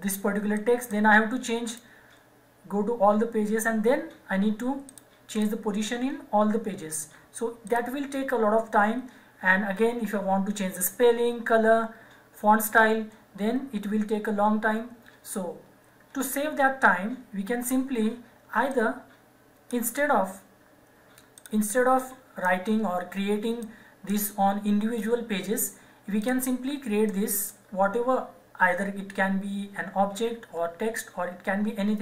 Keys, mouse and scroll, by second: 4.8 click, 6.8 click, 7.6 click, 18.8 click.